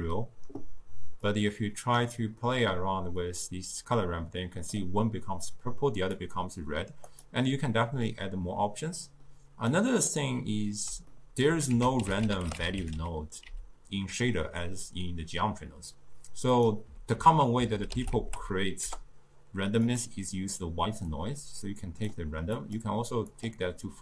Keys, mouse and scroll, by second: 1.3-6.2 drag, 7.1 click, 9.0-9.8 middle drag, 9.8 click, 11.2-11.8 middle drag, 11.8 ctrl+a, 17.2 ctrl+a, 20.3-21.2 middle drag, 21.2 click, 22.6-24.0 drag.